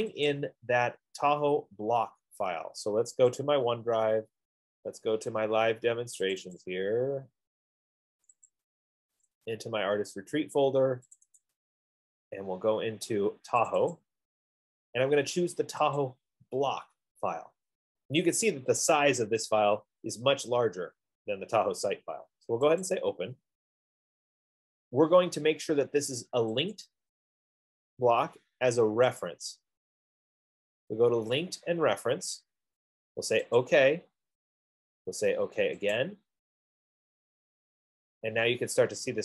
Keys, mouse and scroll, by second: 0.6 click, 3.6 click, 6.7 click, 7.1 click, 8.7 click, 8.9 click, 9.6 click, 9.7 click, 11.6 click, 11.9 click, 14.1 click, 14.4 click, 16.4 click, 22.0 click, 23.4 click, 27.1 click, 29.6 click, 34.0 click, 36.3 click, 38.4-39.2 scroll.